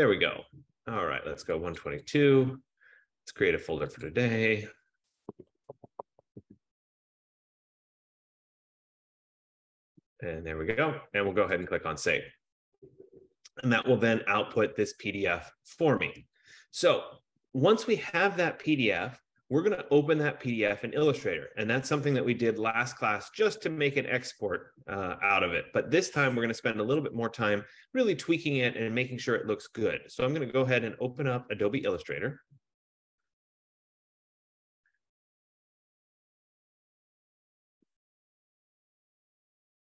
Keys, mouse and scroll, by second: 1.9 click, 2.2 click, 4.4 click, 5.3-6.7 typing, 7.8 click, 8.5 click, 8.7 click, 11.8 click, 16.8 click, 27.2 click, 32.1 click.